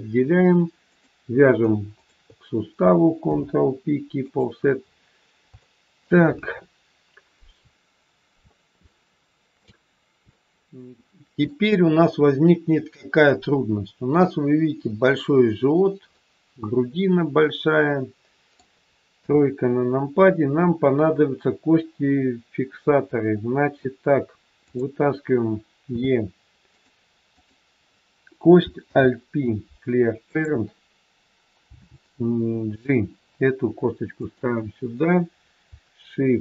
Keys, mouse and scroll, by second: 0.1-0.5 scroll up 2, 0.8 click, 1.8 shift+click, 3.1 ctrl+p, 4.7 scroll down 4, 5.5 shift+middle click, 8.7 shift+scroll down 1, 8.9 shift+middle click, 16.1 middle click, 19.1 KP_3, 24.6 click, 25.9 e, 27.3 click, 28.9 alt+p, 31.6 g.